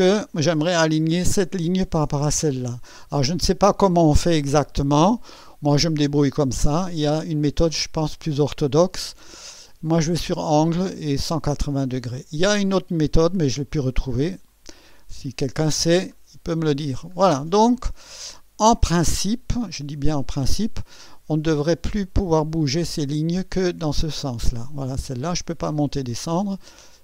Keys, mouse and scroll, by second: 5.3 click, 7.3 click, 10.0 click, 14.5 click, 16.1 scroll up 1, 16.8 scroll down 1, 17.4-20.2 right drag, 23.4-26.3 drag.